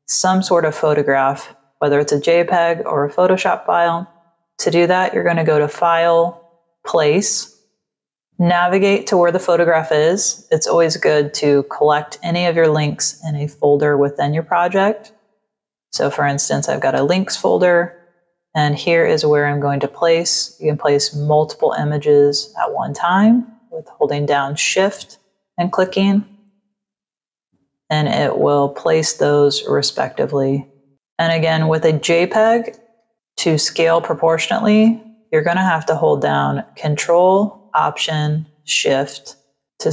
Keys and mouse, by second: 4.4 click, 7.4 click, 15.8 click, 26.0 click, 28.3 click, 29.1 click, 30.0 click, 30.8 click, 32.9 ctrl+-, 38.8 ctrl+alt+shift+click.